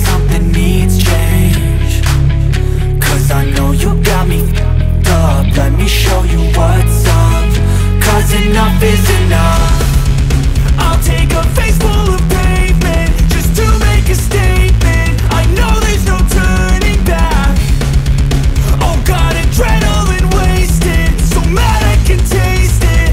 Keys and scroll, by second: 10.7 d, 11.1 alt+shift+Delete, 11.9 alt+shift+super+Delete, 12.2 super+t.